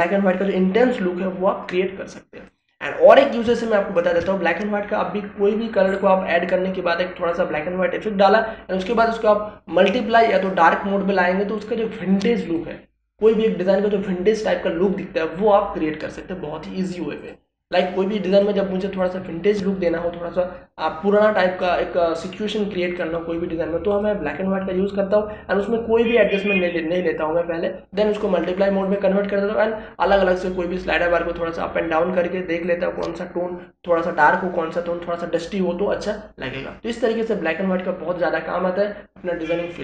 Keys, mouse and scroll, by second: 3.4 click, 4.5 space, 4.6-9.9 ctrl+drag, 18.1 click, 27.2-39.8 drag.